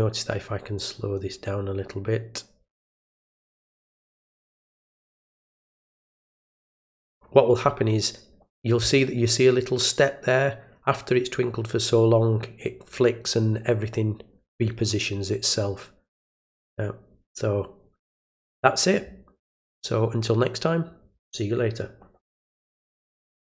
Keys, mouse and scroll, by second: 0.7-1.1 drag, 5.3 click, 23.5 click.